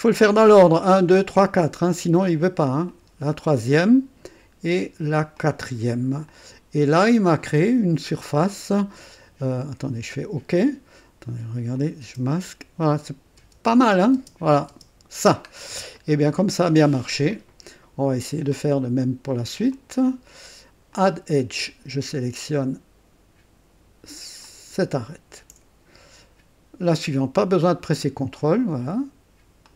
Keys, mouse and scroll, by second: 2.9 click, 5.3 click, 6.3-7.7 drag, 7.8 scroll up 2, 8.4 right click, 10.6 click, 11.7 click, 12.0 space, 13.3 space, 14.1 space, 14.6 space, 15.5 scroll down 1, 15.9 right click, 17.3 click, 19.7 click, 20.9 click, 24.4 click, 28.0 click, 29.6 click.